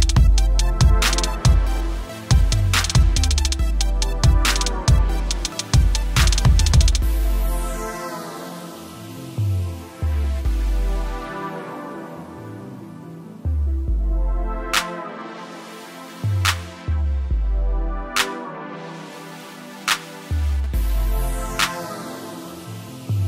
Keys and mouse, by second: 1.9 =, 3.3 typing, 5.3 click, 9.8 click, 10.1-15.9 typing, 10.5 click, 16.9 typing, 20.1 typing, 21.3 ctrl+Num_Lock, 21.7-22.8 typing.